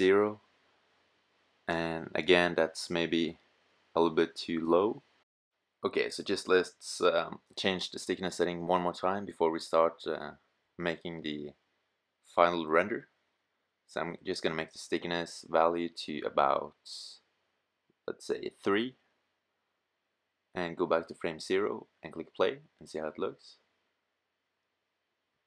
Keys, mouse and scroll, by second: 19.6 middle click.